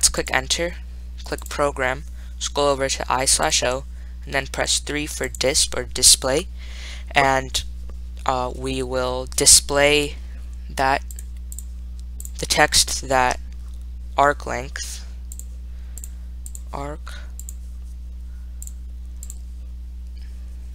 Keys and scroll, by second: 0.5 Return, 3.7 Right, 5.5 3, 16.3 *, 17.7 0, 18.9 ).